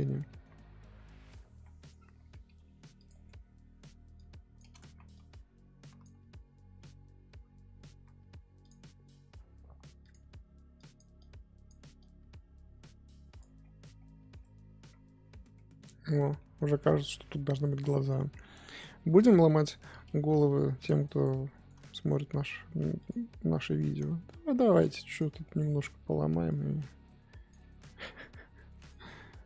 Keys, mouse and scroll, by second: 0.2 middle click, 0.6-0.9 scroll down 1, 0.9-1.5 scroll up 1, 1.5 ctrl+z, 1.8 middle click, 1.9-2.4 scroll up 7, 2.4 f, 3.1 middle click, 3.2 scroll down 1, 3.3-4.1 scroll up 1, 4.1 click, 4.8 ctrl+z, 5.1-8.6 drag, 10.1 click, 10.7-13.5 drag, 13.5-13.9 scroll down 10, 13.9 middle click, 14.9 scroll up 3, 15.6 middle click, 16.0-16.3 scroll down 4, 16.3 middle click, 16.7-17.8 scroll up 1, 17.9 middle click, 18.2-19.2 scroll up 2, 19.2 middle click, 19.5-20.1 scroll up 3, 21.2 click, 21.5 shift+middle click, 21.8-22.3 scroll up 2, 23.0 click, 23.8 shift+middle click, 24.1-24.5 scroll up 1, 24.5 f, 25.2 scroll down 2, 25.4 middle click, 25.6-26.4 scroll up 1, 26.4-28.9 drag.